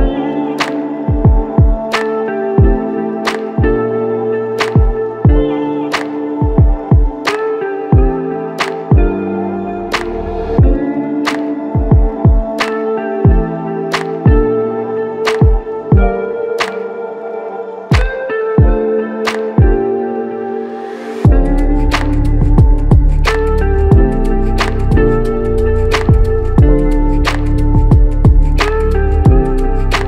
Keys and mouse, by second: 2.0 alt+click, 3.3 r, 7.8 shift+click, 9.7 shift+click, 10.3 g, 11.1 alt+click, 12.5 double click, 16.3 alt+click, 18.0 double click, 19.4 alt+click, 21.1 double click, 21.5 alt+click, 23.1 double click, 24.9 alt+click, 25.9 double click, 29.8 alt+click.